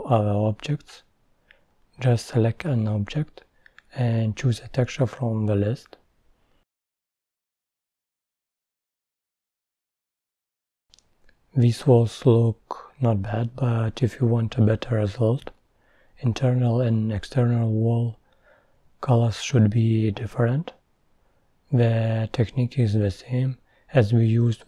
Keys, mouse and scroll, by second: 2.9-3.8 drag, 3.8-4.2 scroll down 3, 4.2 middle click, 5.0 scroll down 1, 5.3-6.3 middle drag, 6.3 click, 6.9 click, 8.3 click, 8.9 shift+click, 9.7-10.1 drag, 10.8-11.2 drag, 11.4 click, 13.3 click, 13.6 scroll up 7, 13.8 middle click, 14.1 scroll down 3, 14.5 click, 14.9 scroll up 3, 15.1-16.1 middle drag, 16.4 scroll up 3, 16.6 scroll down 11, 17.0-18.1 middle drag, 18.1 click, 21.2 click, 21.3-21.7 middle drag, 21.7 scroll up 3, 21.8-22.5 middle drag.